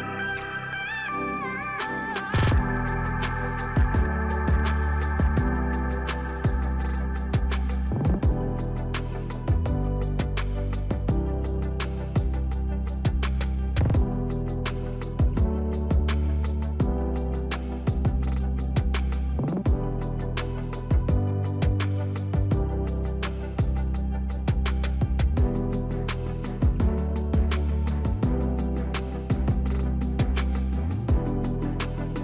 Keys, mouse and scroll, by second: 5.3-9.6 drag, 11.9-15.5 drag, 25.2 click.